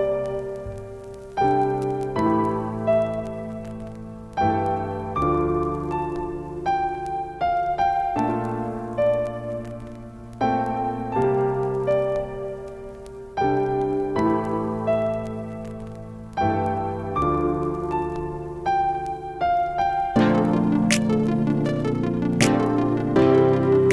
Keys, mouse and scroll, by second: 0.3 click, 6.8 5, 7.6 click, 10.6 right click, 11.5 click, 12.7 ctrl+space, 13.4 click, 13.6 space, 14.6-22.5 alt+drag, 18.7 typing, 22.5 ctrl+space, 22.6 ctrl+click, 22.8 ctrl+space, 23.1 click, 23.4 space.